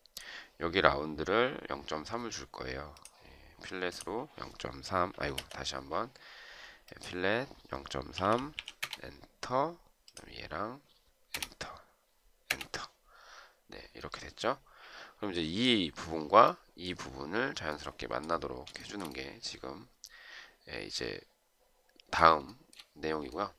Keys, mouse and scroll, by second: 4.9 Escape, 7.7-8.9 typing, 11.0 Return, 12.1 Return, 18.6 shift+right click, 22.3 shift+right click.